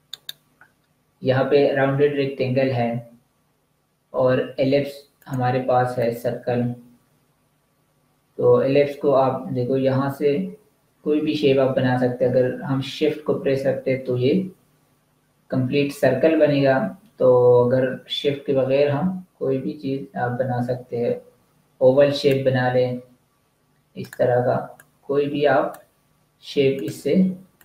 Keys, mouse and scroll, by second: 0.1 right click, 5.1 click, 23.9 click.